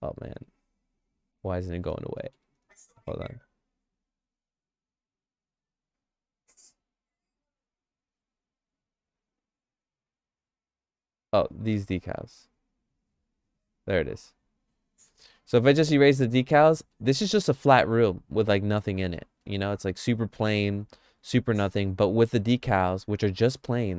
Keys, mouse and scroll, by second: 1.0 click, 1.0 middle click, 2.2 shift+middle click, 3.2 click, 5.1 click, 7.7 click, 12.1 click, 13.2 click, 14.3 click, 15.6 click, 16.1 click, 16.4 click, 16.9 middle click, 17.2-19.2 shift+middle drag, 20.2 middle click, 20.6 shift+middle click.